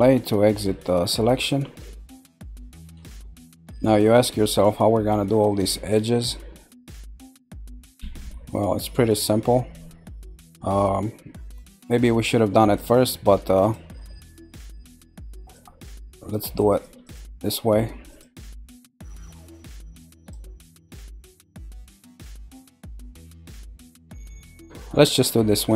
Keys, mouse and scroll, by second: 0.0 scroll down 1, 0.7 middle click, 1.6-2.0 scroll up 1, 2.0-3.2 middle drag, 3.2 scroll up 4, 4.0-8.2 shift+middle drag, 8.2-8.9 scroll down 2, 8.9-11.9 middle drag, 12.7 click, 13.6 shift+click, 14.2 shift+click, 14.8 shift+click, 15.4 shift+click, 15.8 shift+click, 16.3 shift+click, 16.7 shift+click, 17.0 shift+click, 17.3 click, 18.1 shift+click, 18.5 shift+click, 19.0-20.1 middle drag, 20.1 shift+click, 20.7 shift+click, 21.4 shift+click, 21.8 shift+click, 22.3 shift+click, 22.8 shift+click, 23.4 scroll down 1, 24.2 middle click, 25.0-25.7 scroll up 4.